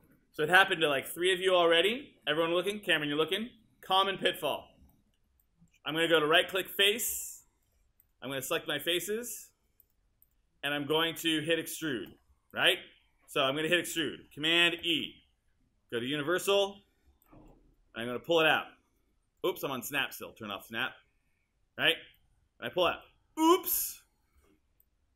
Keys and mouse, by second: 5.6 alt+click, 6.1 alt+right click, 14.8 super+e.